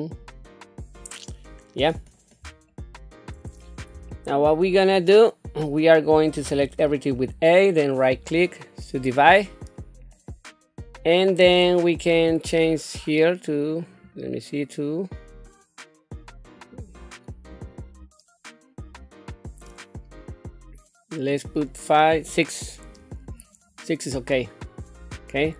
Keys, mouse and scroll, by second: 2.7 shift+middle click, 3.6-3.9 scroll up 2, 4.1 shift+middle click, 5.4-5.8 scroll down 1, 6.4 a, 7.9 right click, 9.1 right click, 10.1-11.5 middle drag, 14.0 click, 16.6 click, 17.5 click, 21.3 click, 22.1 click, 23.4-25.5 middle drag.